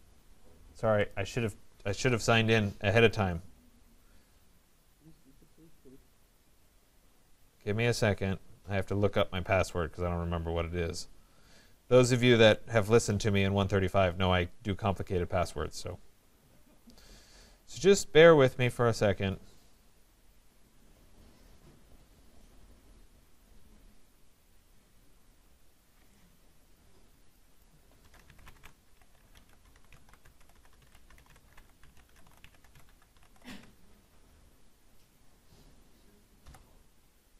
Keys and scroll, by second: 33.4 Tab.